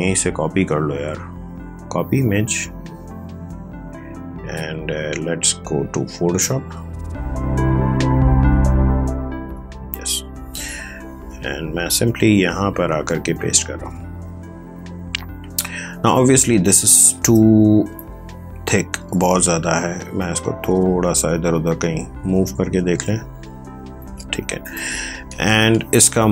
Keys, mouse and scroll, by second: 4.4 alt+Tab, 5.5 alt+Tab, 6.9 alt+click, 8.4 alt+Tab, 9.9 alt+click, 13.8 ctrl+v, 15.9 space, 16.3 ctrl+click, 16.4 space, 17.7 ctrl+space, 17.7 t, 19.0 click.